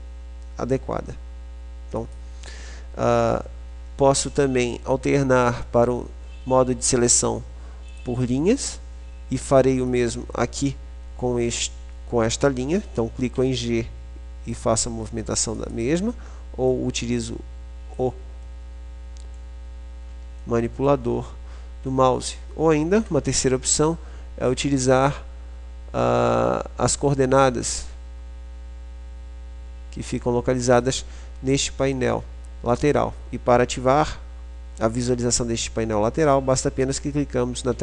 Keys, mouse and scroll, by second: 8.1-9.9 drag, 10.1-11.9 drag, 13.6 g, 16.8-18.6 drag, 18.6 middle click, 19.3 click, 28.1-29.9 drag.